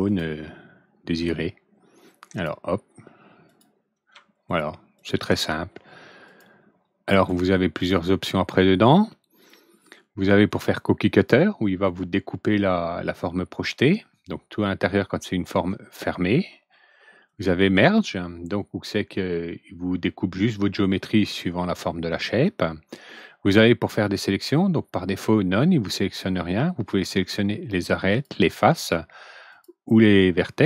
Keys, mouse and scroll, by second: 0.0 click, 2.3 click, 3.4 click, 4.4 ctrl+click, 4.9 ctrl+click, 6.2 ctrl+click, 7.0 ctrl+right click, 7.7 ctrl+click, 10.4 ctrl+click, 17.2 ctrl+click, 26.9 ctrl+click, 28.0 ctrl+click, 29.4 ctrl+click.